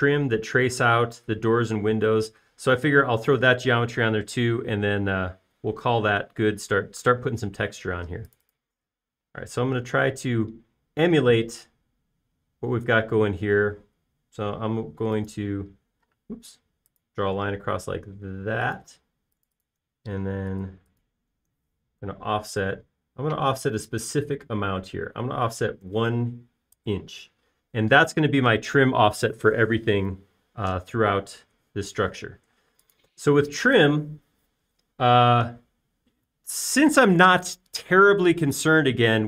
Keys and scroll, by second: 11.3 typing, 17.8 l, 20.4 space, 23.3 f, 27.5 1, 28.1 Return, 28.9 space, 33.1 Escape, 33.4 p, 33.9 space, 36.6 typing.